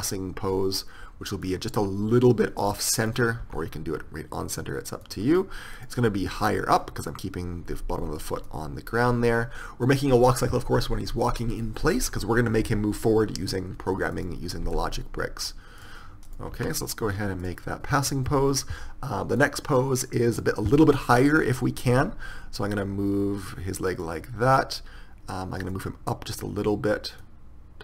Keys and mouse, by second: 3.2-5.2 drag, 3.6 r, 6.0-14.3 drag, 15.0 r, 16.8 r, 20.9-24.1 drag, 22.1 r, 25.8-27.8 drag.